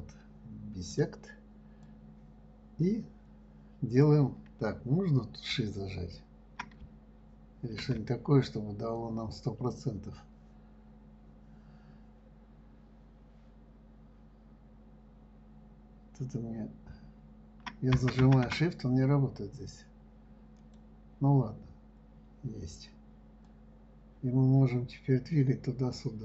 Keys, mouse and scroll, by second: 0.0-2.6 drag, 23.8 click.